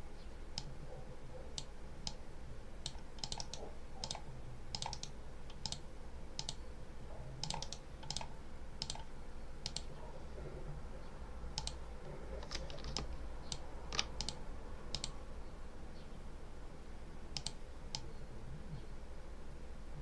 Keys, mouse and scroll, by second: 0.4 click, 1.9 click, 3.1 click, 3.3 right click, 3.9 click, 4.6 click, 4.8 right click, 5.5 click, 6.2 click, 7.3 click, 8.0 click, 8.7 click, 9.5 click, 11.4 click, 12.8-13.6 ctrl+alt+drag, 14.0 ctrl+alt+click, 14.8 click, 17.2 click, 17.8-20.0 drag.